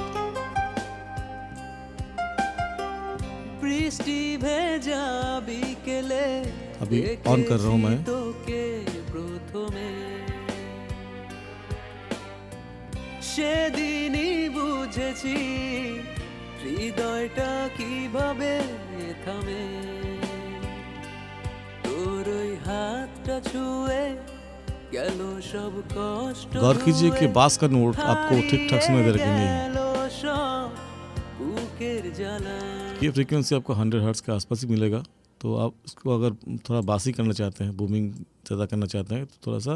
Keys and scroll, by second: 32.9 space.